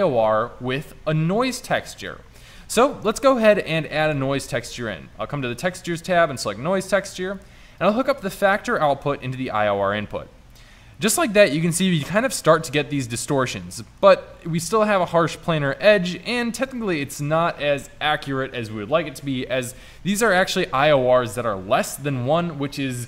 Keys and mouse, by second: 4.1 shift+a, 10.7-12.7 middle drag, 13.8 click, 13.9-17.5 middle drag, 14.0 click.